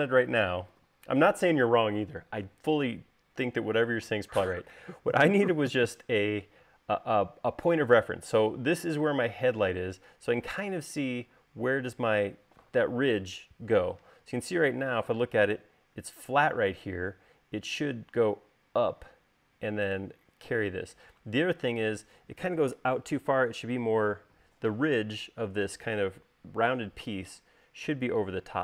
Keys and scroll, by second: 1.2 u.